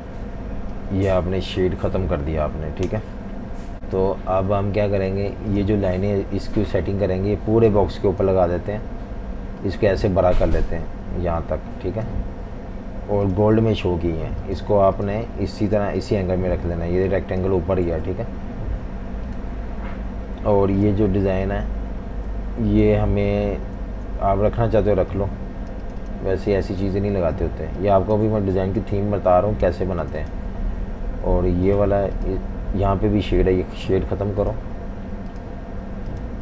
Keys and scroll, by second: 2.8 Delete, 17.9 super+z, 23.8 super+z.